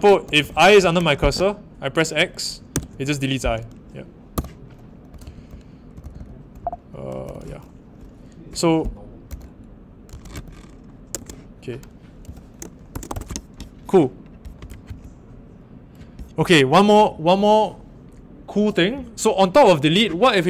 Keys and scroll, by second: 0.0-0.8 typing, 2.7 x, 4.3-6.5 typing, 9.8-11.1 typing, 12.2-13.5 typing, 14.8 shift+;.